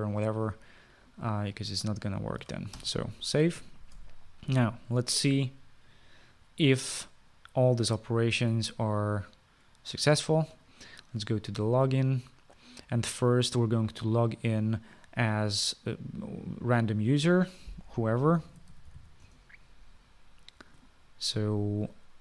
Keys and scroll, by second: 4.0 ctrl+s, 19.4-20.7 typing.